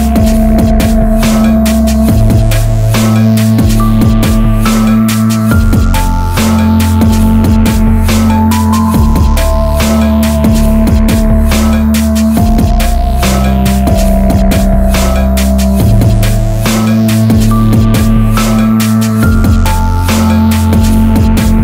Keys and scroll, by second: 3.7 alt+z, 11.1 alt+z, 18.7 ctrl+z, 20.0 ctrl+1.